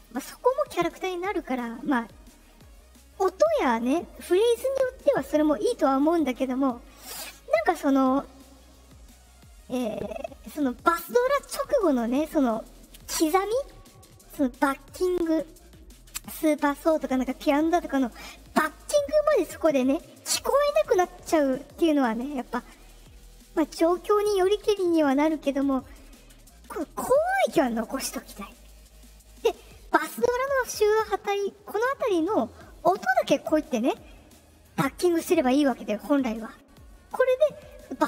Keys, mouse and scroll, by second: 0.5 right click, 1.3 click, 33.2-37.6 drag.